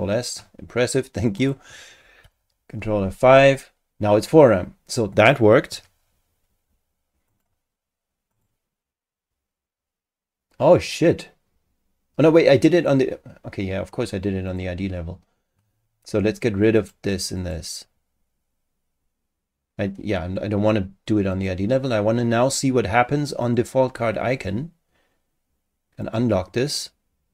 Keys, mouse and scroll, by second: 1.4 click, 2.2 ctrl+F5, 7.3 click, 8.3 click, 14.5 click, 16.8 click, 17.4 click, 21.3 click, 23.4 click, 26.0 click.